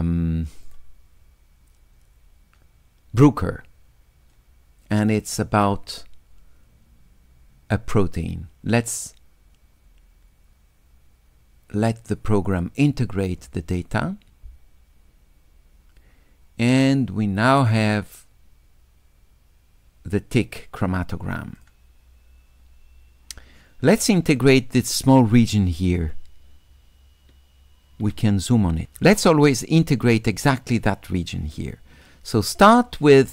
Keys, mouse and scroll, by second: 0.7 click, 5.1 click, 21.6-23.4 drag, 25.5 s, 25.6-28.8 right drag.